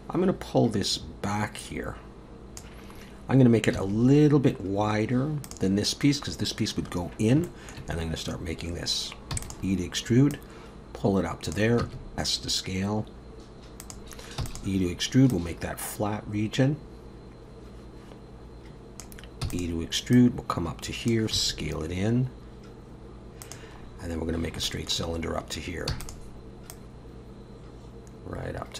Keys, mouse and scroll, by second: 2.9-3.8 scroll up 2, 3.8 s, 7.4 shift+middle click, 9.4 e, 10.3 click, 11.8 s, 14.4 e, 15.3 click, 19.4 e, 20.1 click, 21.3 s, 23.8-24.6 scroll down 6, 24.6 shift+middle click, 25.9 e, 26.7 click.